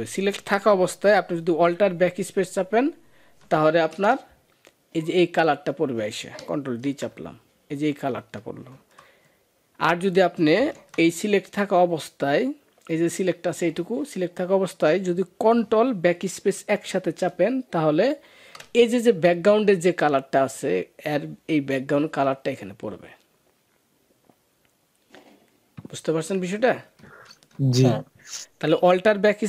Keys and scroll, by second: 3.7 alt+BackSpace, 6.6 ctrl+d, 8.5 ctrl+z, 18.0 ctrl+BackSpace, 27.3 ctrl+d.